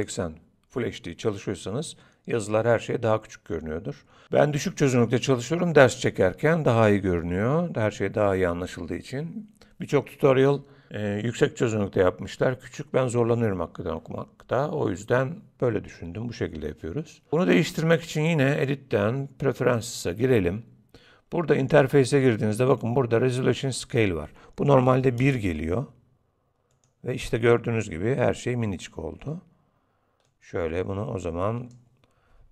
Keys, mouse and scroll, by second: 18.5 click, 30.3 click.